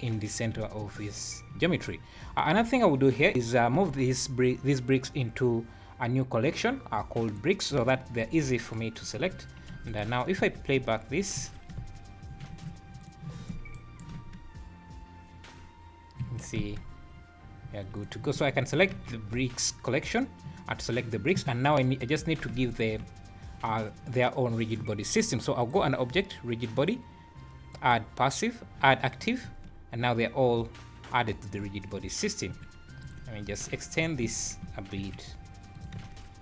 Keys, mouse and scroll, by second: 0.3 scroll down 4, 1.1 scroll up 2, 1.9 scroll down 2, 3.8 m, 9.2 alt+h, 9.8 alt+a, 9.9 click, 10.4 space, 11.4 Escape, 11.8 space, 12.4 Escape, 13.0 click, 13.8 shift+right click, 14.2 space, 16.2 Escape, 16.6 space, 17.7 Escape, 18.0 click, 18.9 shift+g, 22.7 shift+click, 25.6 click, 29.4 space, 32.5 Escape, 33.0 click, 33.4 `, 33.6 click, 34.0 s, 36.0 space.